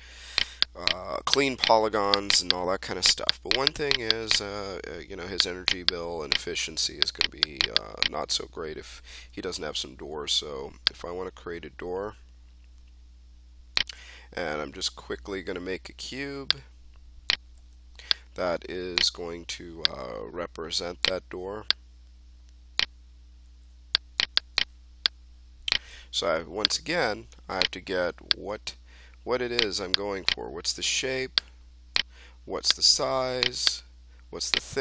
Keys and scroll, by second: 9.2 space, 15.2 w, 17.4 e, 19.1 w, 23.4 f, 25.5-26.3 typing.